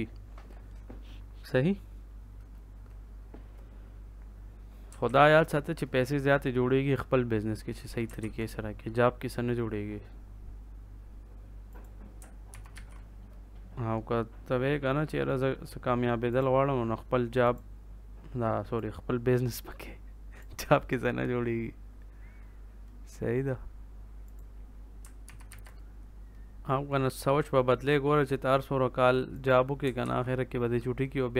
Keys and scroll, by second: 5.0 ctrl+s, 8.1 ctrl+s, 12.5 ctrl+c, 12.7 ctrl+v, 25.2 ctrl+c, 25.4 ctrl+v, 29.9 ctrl+s.